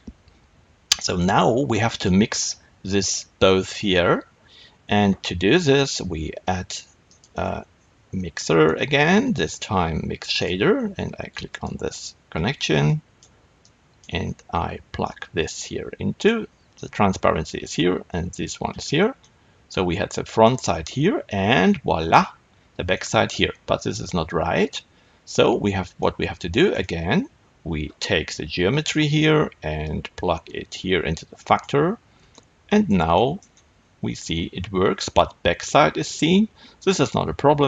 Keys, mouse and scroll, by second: 11.8 click, 12.8 click, 13.5-19.1 drag, 19.1-28.2 middle drag, 22.4-22.8 scroll up 2, 28.2 click, 31.6 click, 32.5-37.6 middle drag.